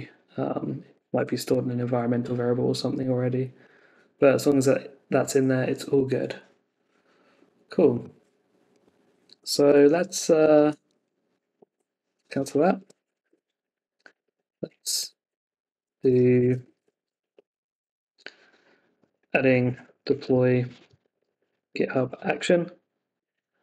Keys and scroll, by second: 1.1 super+v, 9.9 super+Tab, 11.6 ctrl+c, 13.2 Return, 15.2 Return, 23.1 Return.